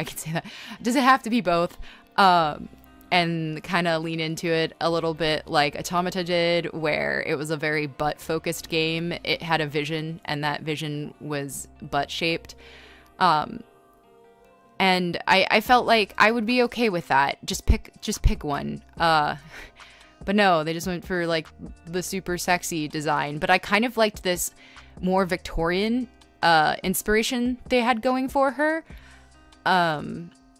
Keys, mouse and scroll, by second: 1.3 scroll, 2.7 scroll, 3.1 ctrl+z, 4.4 b, 6.1 space, 8.1 space, 8.1 e, 8.4 e, 10.9-13.9 typing, 15.5 r, 16.0 ctrl+z, 17.9-21.2 typing, 18.6 ctrl+z, 24.2 space, 24.5 space, 27.1-30.5 typing.